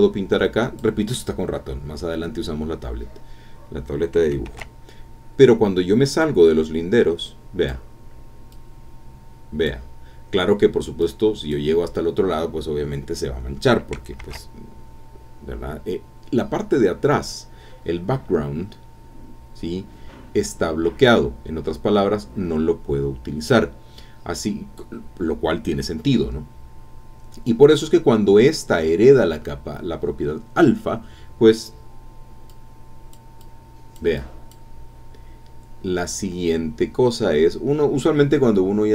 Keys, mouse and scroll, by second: 4.4 ctrl+z, 6.2-7.9 drag, 8.5-9.8 drag, 11.0 click, 14.2 ctrl+z, 18.9-19.3 scroll down 2, 23.8-24.3 scroll down 2, 24.3 scroll down 1, 26.5 scroll up 2, 27.2 scroll down 2, 32.5 click, 33.4-34.7 drag, 35.9 scroll up 1.